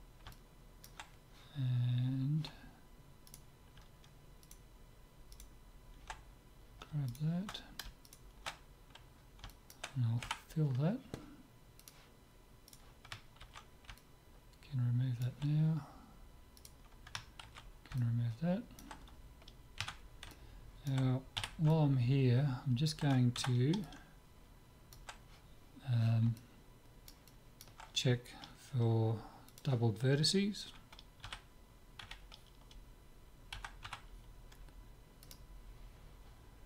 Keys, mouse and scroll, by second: 3.3-9.9 right drag, 9.5 click, 9.9-11.5 middle drag, 10.3 f, 11.8-13.6 drag, 12.7-14.6 right drag, 13.6 ctrl+x, 14.0 click, 14.6-16.0 middle drag, 16.6-18.5 right drag, 17.5 ctrl+x, 18.0 click, 18.5-19.8 middle drag, 19.8 Tab, 20.3-23.5 middle drag, 21.4 z, 23.5 Tab, 23.9-25.6 middle drag, 25.6 middle click, 26.4-29.3 middle drag, 29.5-31.3 drag, 31.3 z, 32.1 a, 33.5 a, 33.9 w.